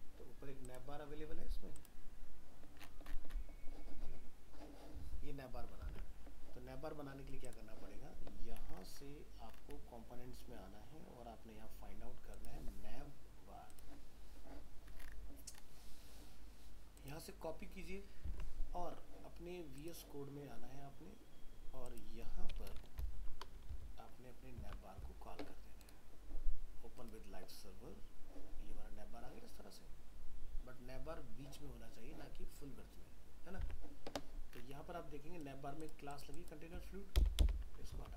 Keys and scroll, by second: 5.9 alt+Tab, 18.3 alt+Tab, 23.7 ctrl+v, 33.6 alt+Tab, 37.9 ctrl+s.